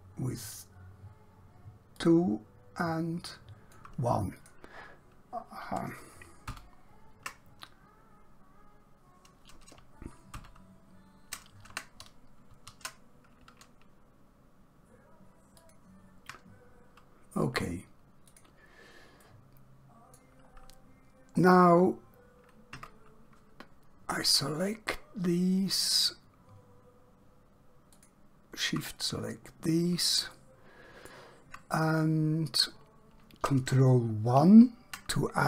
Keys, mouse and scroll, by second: 2.0 click, 6.5 ctrl+z, 9.7 ctrl+Num_Lock, 10.3 ctrl+z, 12.6 ctrl+b, 18.3 click, 19.3 middle click, 20.6 scroll down 1, 21.5 scroll up 1, 22.9 Tab, 24.2 click, 25.6 shift+click, 29.0 scroll down 1, 29.6-30.3 scroll up 1, 30.4 shift+middle click, 34.3 ctrl+1.